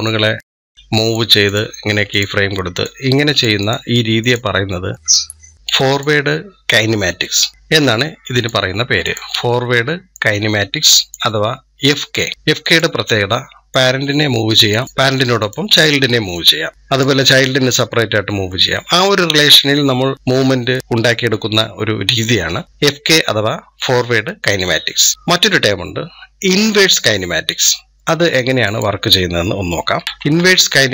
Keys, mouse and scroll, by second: 1.3-5.3 drag, 8.2-14.8 drag, 15.2-17.8 drag, 28.5 click, 29.8-30.2 ctrl+z, 30.5 ctrl+z, 30.8 ctrl+z.